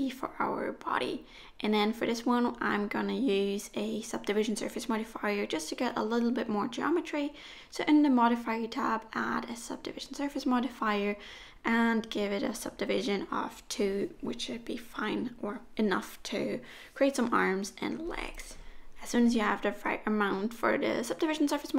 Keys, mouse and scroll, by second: 1.1 right click, 3.1 click, 3.6 click, 7.9 click, 12.0 click, 14.9 click, 16.8 middle click, 20.7 middle click.